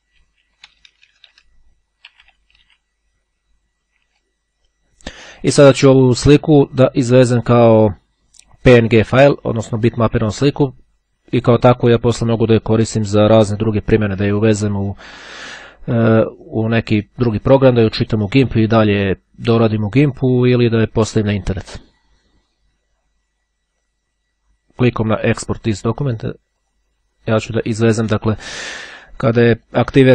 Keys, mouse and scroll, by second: 0.1 Right, 1.0 Delete, 1.8 v, 2.0 Return, 23.4-27.4 drag, 29.0 click, 29.7-30.1 drag.